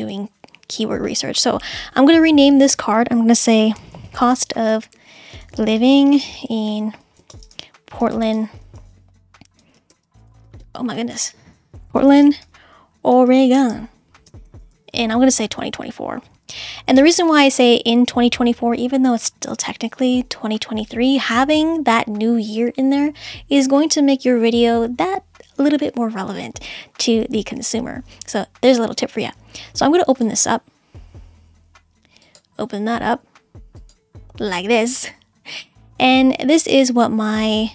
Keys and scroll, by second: 3.5-17.0 typing.